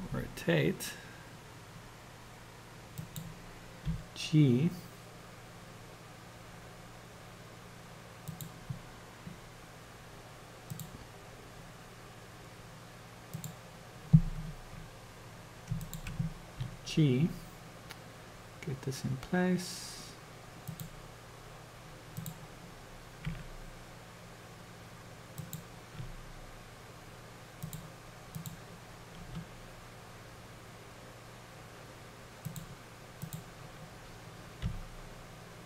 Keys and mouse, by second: 4.2 g, 13.2 click, 15.8 shift+click, 16.8 g, 23.3 r, 26.2 g, 28.4 click, 29.5 g, 33.2 click, 34.9 g.